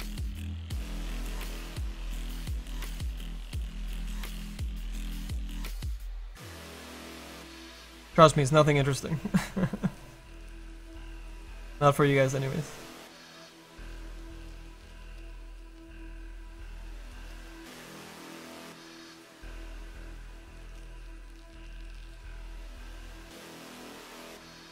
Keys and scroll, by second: 5.3 s, 22.7 s.